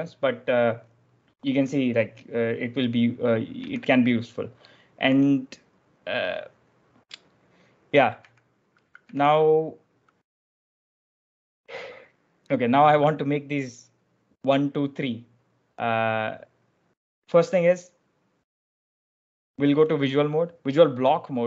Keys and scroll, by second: 3.5 k, 5.0 j, 8.1 k, 8.9 k, 10.6-11.3 typing.